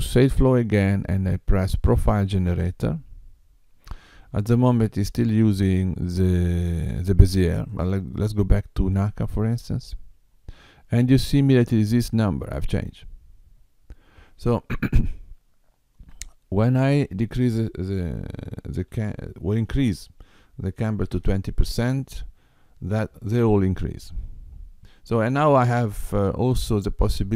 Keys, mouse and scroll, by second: 0.4 click, 1.7 click, 7.7 click, 16.8 click, 26.5 middle click.